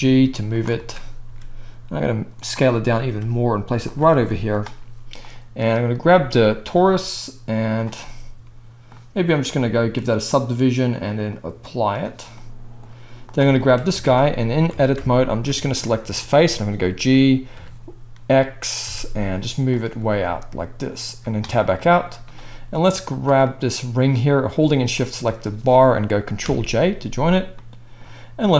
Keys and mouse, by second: 0.7 shift+click, 0.9 click, 0.9-2.8 right drag, 1.2 s, 2.8-5.2 drag, 3.0 g, 4.1 s, 5.2 middle click, 5.3-6.7 drag, 6.7-9.3 right drag, 9.3-13.3 middle drag, 13.3 shift+right drag, 13.5 shift+click, 13.6 shift+middle drag, 13.7 click, 13.8-15.2 right drag, 14.0 Tab, 14.7 alt+a, 15.2 alt+shift+middle click, 15.3-25.0 alt+shift+right drag, 16.9 g, 21.4 Tab, 25.0 shift+middle click, 25.4-27.7 right drag, 26.4 ctrl+j, 27.7 click, 28.0-28.5 right drag.